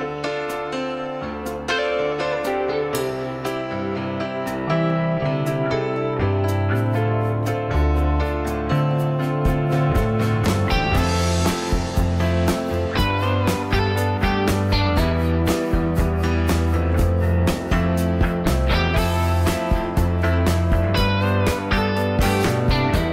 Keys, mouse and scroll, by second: 2.4 m, 9.8 s, 22.1 F2, 23.0 o.